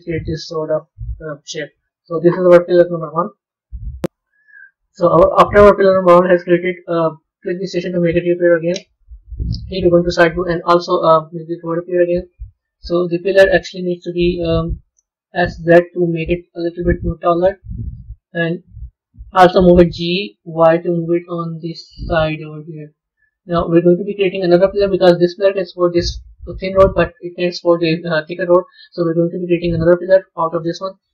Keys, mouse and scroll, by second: 1.9 Tab, 7.5 click, 8.0 scroll down 2, 9.3 KP_3, 11.6 click, 12.1-14.7 scroll down 2, 15.2 s, 17.5-18.0 scroll down 2, 19.8 g, 24.0-27.1 middle drag.